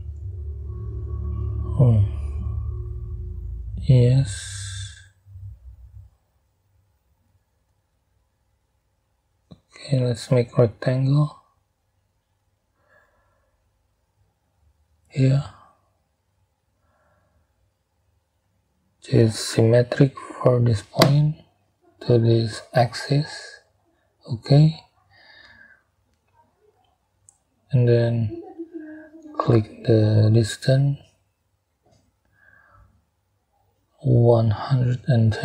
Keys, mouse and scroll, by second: 0.9 middle click, 4.2 middle click, 5.7 scroll down 2, 6.2 scroll up 2, 8.8 middle click, 12.0 middle click, 14.8 middle click, 15.4 middle click, 17.7 click, 19.4 click, 21.0 click, 22.6 click, 29.3 click, 32.0 click, 34.4 1, 35.1 0.